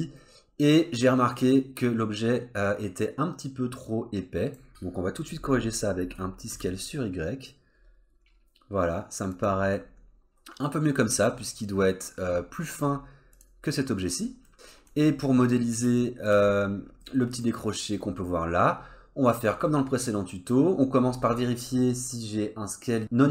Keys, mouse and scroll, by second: 6.0 s, 9.7 middle click, 13.3 click, 14.0-14.5 scroll down 2, 14.5 middle click, 15.0 scroll up 2, 15.4 click, 16.0 shift+middle click, 16.7 scroll up 1, 17.0 middle click, 18.7-19.7 scroll down 2, 19.7 middle click.